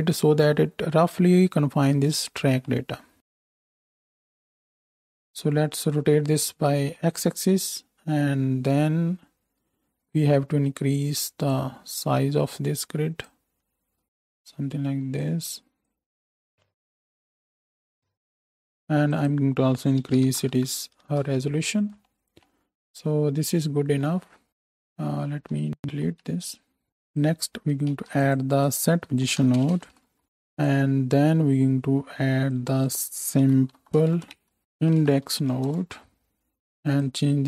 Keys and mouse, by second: 3.2 KP_0, 3.8-13.3 drag, 14.0 alt+shift+a, 25.9 ctrl+x, 25.9-30.6 ctrl+drag, 27.8 shift+a, 30.6-32.4 middle drag, 32.4-36.5 drag, 36.5 middle click, 36.8-37.4 drag.